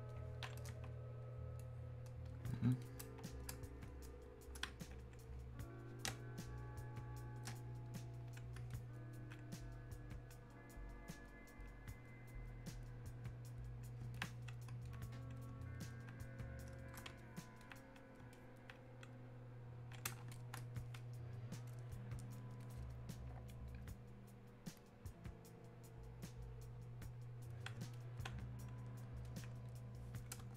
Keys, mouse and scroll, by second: 1.3-2.9 drag, 2.9 click, 3.9-6.1 drag, 6.1 space, 7.0 space, 7.9-14.9 drag, 14.9 alt+click, 16.3-17.6 drag, 17.7-28.0 alt+drag, 29.3-30.5 alt+drag.